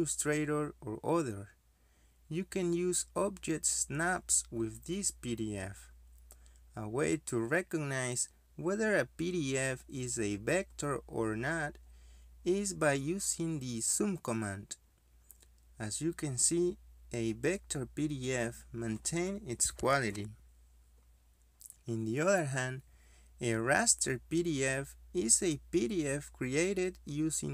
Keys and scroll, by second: 8.8 Delete, 8.8 Escape, 10.5 Escape, 13.2 z, 13.3 space.